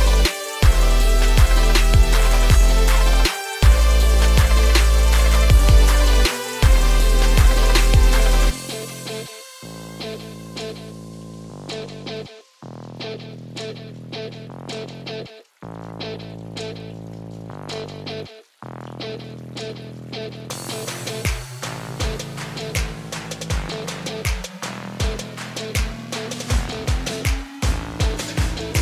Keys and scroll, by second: 22.2 ctrl+v.